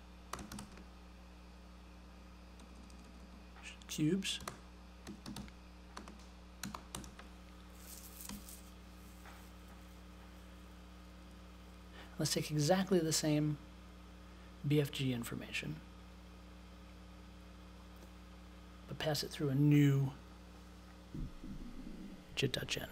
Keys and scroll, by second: 0.0-1.0 typing, 2.5 BackSpace, 4.1-8.2 typing, 9.3 BackSpace.